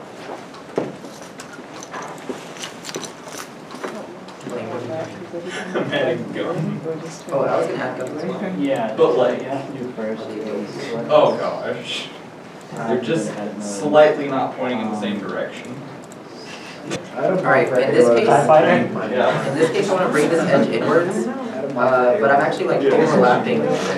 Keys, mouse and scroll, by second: 1.9 middle click, 3.5 2, 4.3 3, 5.4 3, 6.0 shift+click, 7.3 shift+l, 8.6 shift+x, 9.8 shift+click, 10.9 middle click, 12.9 shift+click, 17.1 2, 17.9 middle click, 18.7 shift+click, 21.1 g, 21.1 y, 23.7 y, 23.7 right click.